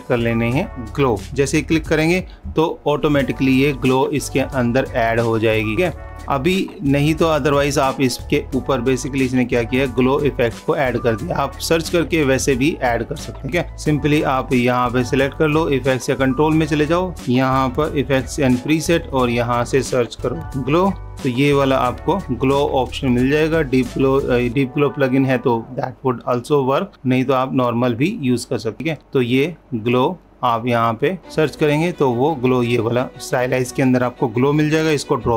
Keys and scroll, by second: 2.8 super+=, 14.5 super+-.